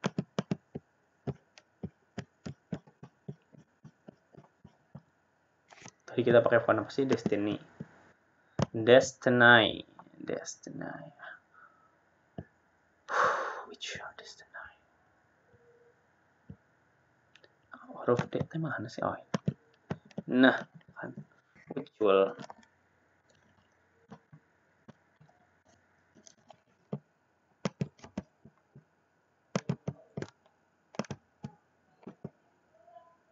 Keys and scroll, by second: 32.5 BackSpace.